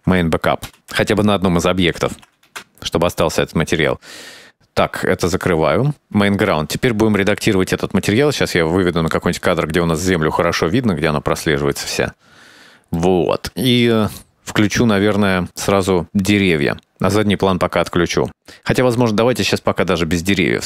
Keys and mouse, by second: 1.2-3.7 drag, 5.3 click, 8.1-12.2 drag, 13.3 shift+middle click, 14.5-15.2 drag, 16.9 click, 19.6 click.